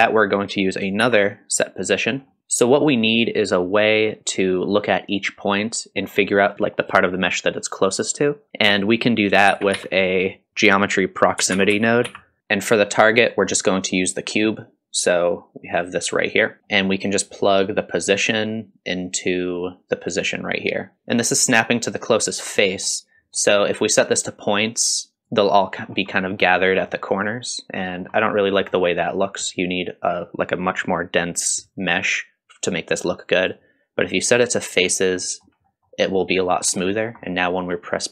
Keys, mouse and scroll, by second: 1.0 shift+d, 2.3 middle click, 9.5 shift+a, 12.4 click, 13.1-15.9 drag, 16.6 shift+right click, 16.6 g, 16.6-18.2 middle drag, 18.2-20.7 drag, 20.9 middle click, 22.5-23.0 middle drag, 23.4 middle click, 24.3-25.5 drag, 25.8-26.1 scroll down 2, 26.1-26.6 middle drag, 26.6 scroll down 1, 26.9-28.1 middle drag, 28.1 scroll up 2, 28.4-28.8 middle drag, 28.8-29.2 scroll up 2, 29.2-32.9 middle drag, 33.4-35.0 drag, 35.2-37.0 middle drag, 37.0 scroll down 1, 37.2-38.1 middle drag.